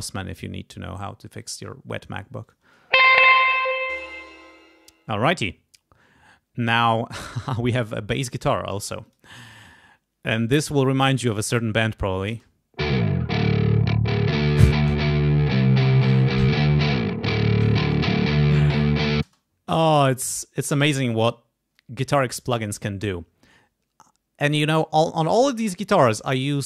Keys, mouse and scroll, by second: 0.3 click, 1.4 click, 2.4 click, 2.6 space, 3.7 space, 3.9 click, 6.5 scroll down 2, 8.3 click, 9.0 click, 9.4 scroll up 1, 12.3 space, 18.5 click, 19.2 space, 26.0 click.